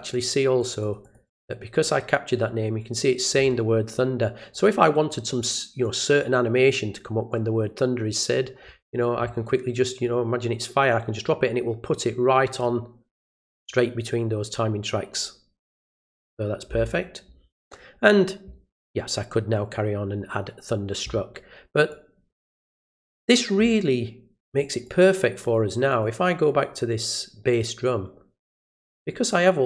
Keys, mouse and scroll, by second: 0.1 click, 0.6 click, 0.8 click, 1.0 click, 1.2 click, 4.5-5.8 drag, 10.0-12.6 drag, 15.8 click, 21.9-23.1 drag, 24.5 click, 24.8 click, 25.1 click, 25.4 click, 25.9 click, 27.5 click.